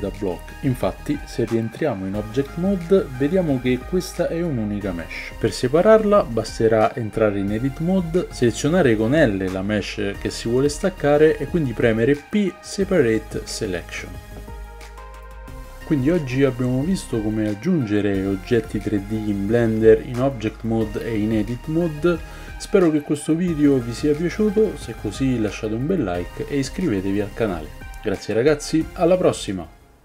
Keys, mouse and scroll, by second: 0.3 click, 0.4-1.8 middle drag, 1.8 click, 1.9-30.0 middle drag, 2.8 g, 4.0 ctrl+z, 6.4 Tab, 7.8 a, 7.9 a, 9.1 l, 13.0 p, 15.0 Tab, 16.6 p.